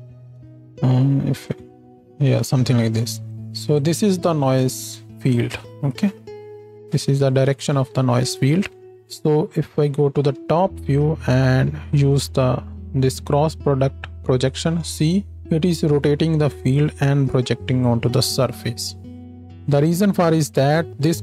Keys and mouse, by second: 9.7 KP_7, 19.2 click, 19.6-21.2 middle drag.